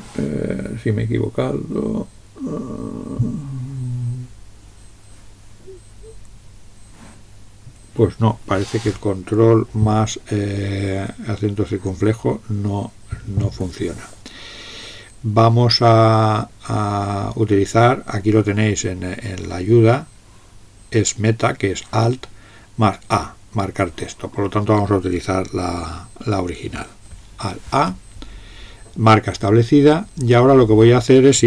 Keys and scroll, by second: 27.7 alt+a.